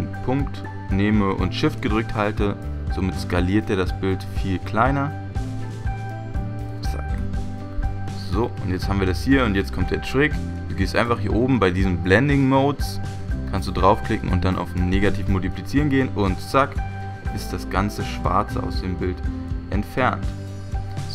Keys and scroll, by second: 7.3 Return, 10.2 Return.